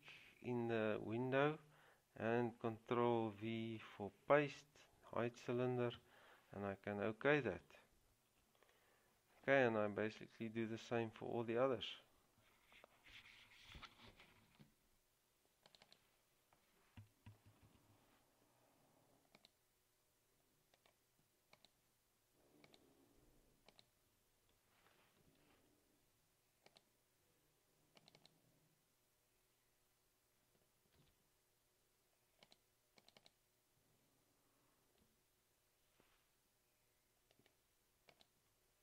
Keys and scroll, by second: 3.5 ctrl+v, 6.1 Return, 17.8 ctrl+c, 25.4 ctrl+v, 31.1 ctrl+c, 35.1 Escape.